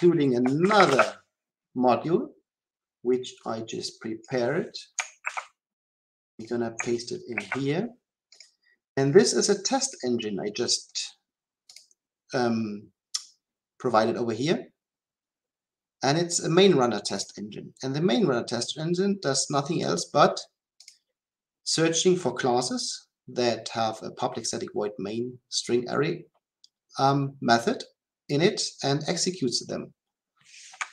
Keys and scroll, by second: 7.3 ctrl+v.